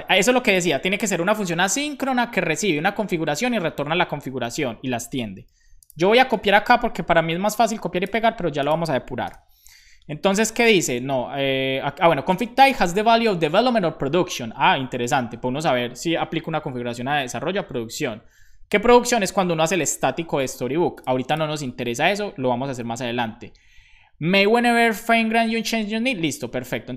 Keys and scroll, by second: 8.2 super+v, 9.3 super+b, 13.2 super+Right, 15.2 super+Left, 21.6 super+Right, 22.3 Down, 22.5 Down.